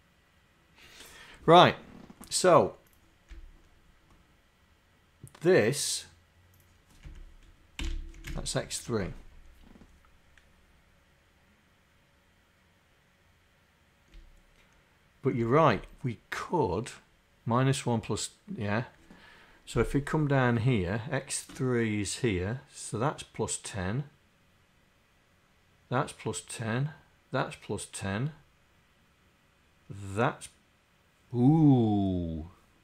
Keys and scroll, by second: 7.1 Right, 7.9 Delete, 7.9 3, 8.2 Down.